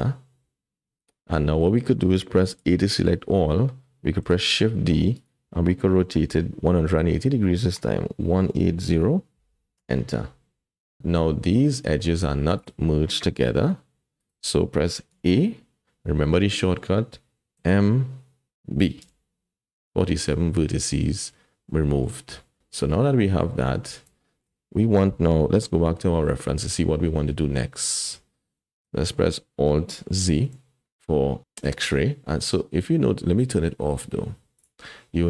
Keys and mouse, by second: 2.6 a, 4.2 shift+d, 7.3 r, 11.0 click, 12.0 click, 12.6 click, 13.4 g, 15.1 a, 16.5 click, 17.6 m, 21.7 middle click, 22.6 alt+a, 22.6 Tab, 22.9 middle click, 24.2 shift+click, 26.5 KP_1, 29.0 shift+click, 30.5 alt+z, 34.6 click.